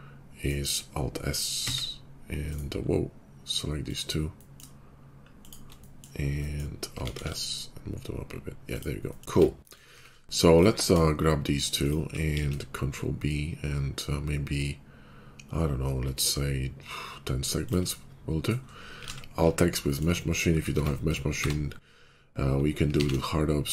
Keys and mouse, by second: 1.5 alt+s, 2.4-3.4 drag, 3.7 click, 3.8-5.3 middle drag, 5.3 shift+click, 5.4-9.0 shift+middle drag, 6.9 alt+s, 9.2 Tab, 9.8 Tab, 11.8 shift+click, 12.3 ctrl+b, 18.9 alt+x, 20.7 Tab, 21.2-22.7 middle drag, 21.2 q, 22.9 alt+x, 23.0-23.7 middle drag.